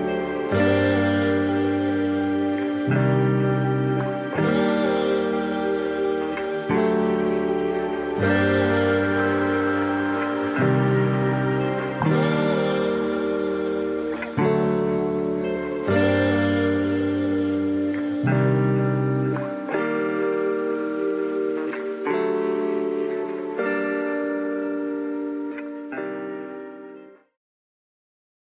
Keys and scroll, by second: 10.8 ctrl+=, 10.9 ctrl+-, 16.4 ctrl+-.